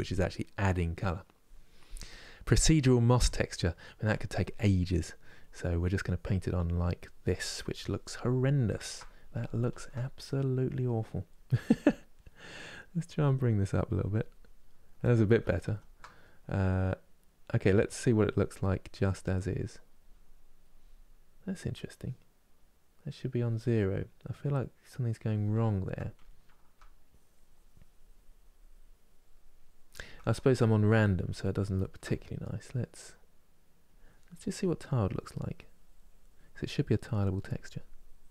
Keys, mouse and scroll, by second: 8.5 ctrl+middle click, 9.4 ctrl+z, 11.5 middle click, 12.5-14.9 drag, 14.9 ctrl+z, 15.3 ctrl+z, 17.0-20.0 drag, 20.0-22.3 middle drag, 22.3-25.3 drag, 25.3-26.8 ctrl+middle drag, 26.8-30.9 drag, 30.9 ctrl+z, 31.3 ctrl+z, 33.4-38.3 drag.